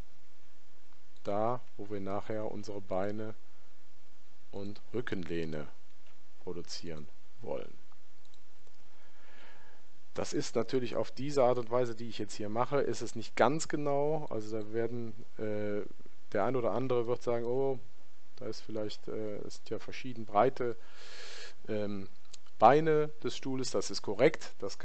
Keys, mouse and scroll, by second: 2.5 ctrl+r, 5.9 ctrl+r, 9.2 ctrl+r, 15.8-18.9 middle drag.